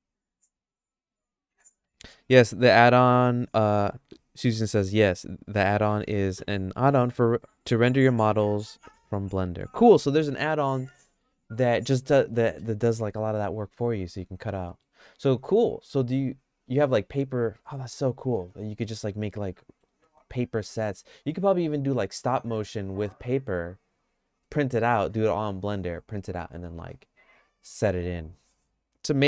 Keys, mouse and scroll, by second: 14.7 middle click, 18.3 middle click, 18.8-19.9 shift+middle drag.